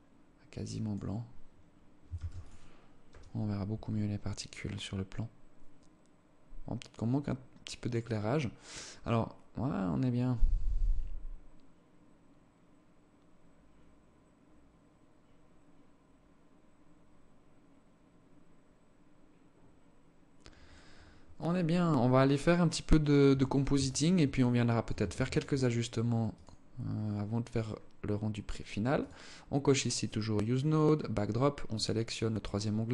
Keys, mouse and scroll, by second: 1.5 ctrl+s, 22.6 Escape, 23.7 alt+shift+click, 24.5 ctrl+s, 25.7 click.